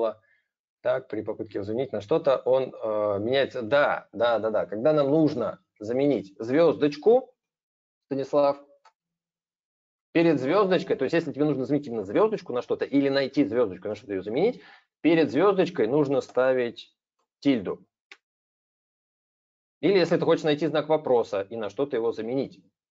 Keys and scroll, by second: 9.7 alt+Tab, 16.2 super+space.